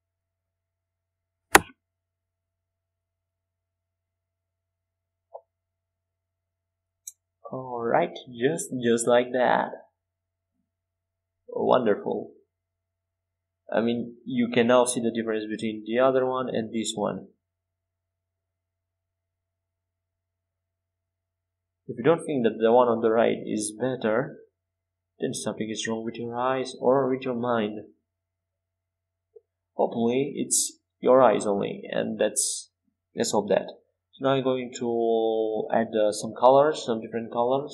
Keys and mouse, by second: 9.2 middle click, 10.2 Tab, 22.1-27.3 drag, 28.0-30.9 drag, 31.7-37.7 right drag, 32.8-37.7 drag.